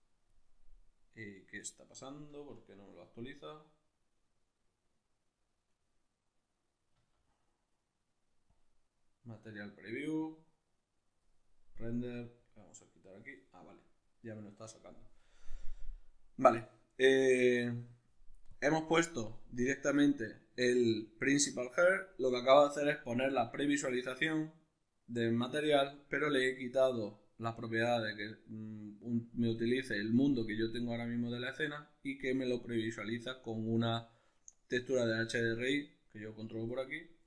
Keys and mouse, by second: 2.3 z, 3.2 right click, 5.7 right click, 7.0 z, 11.8-20.7 drag, 20.7-25.8 ctrl+middle drag, 25.8-37.2 drag.